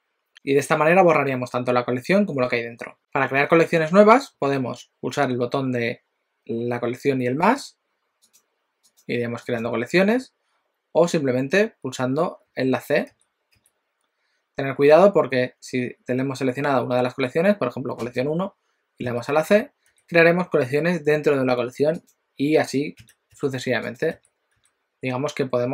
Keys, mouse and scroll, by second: 8.3 click, 8.8 click, 13.2 c, 18.1 click, 19.2 c, 19.5 c, 20.0 c, 22.2 click, 23.0 c, 23.4 c, 24.0 click, 24.2 c, 24.6 c.